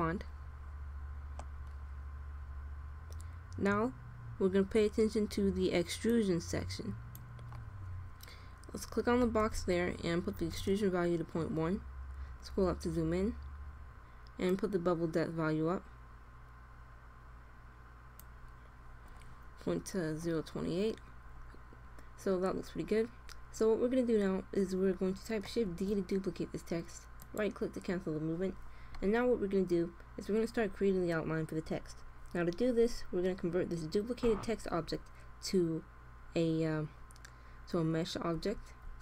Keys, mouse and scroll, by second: 0.2-1.4 drag, 5.9-7.7 drag, 12.3 middle click, 14.3-16.2 drag, 22.2-25.6 middle drag, 25.6 shift+d, 38.4 alt+c.